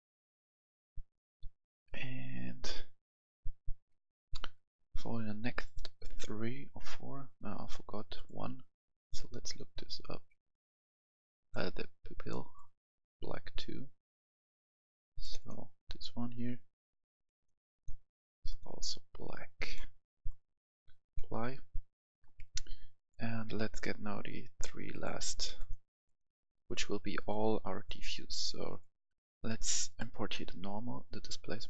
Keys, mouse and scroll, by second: 3.8 F11, 3.8 F10, 4.7 click, 9.5-11.3 scroll down 1, 11.3 click, 17.3-21.0 drag, 22.2 F10, 22.9 click, 30.9 ctrl+click.